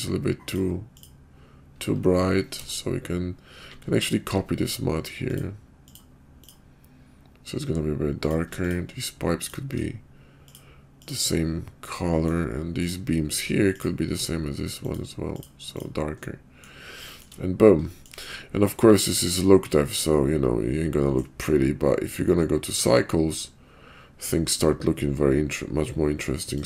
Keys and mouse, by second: 0.4 click, 1.0 click, 2.5 alt+m, 5.3-5.9 drag, 6.4 click, 8.0 click, 10.5-11.0 drag, 12.0 middle click, 12.8 click, 13.8 shift+middle click, 14.8-15.3 drag, 15.8-16.1 drag, 16.2-16.7 middle drag, 17.1 shift+middle click, 17.9 shift+middle click, 19.9-21.2 middle drag, 22.9 drag, 26.6 click.